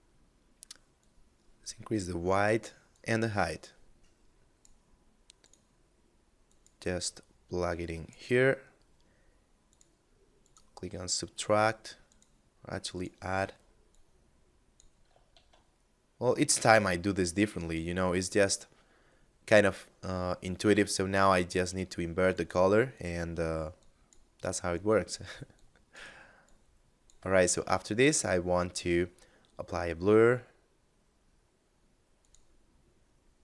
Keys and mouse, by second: 0.1 click, 4.5 click, 8.9 click, 14.5 shift+a, 21.4 click, 26.7 shift+a, 31.3 click.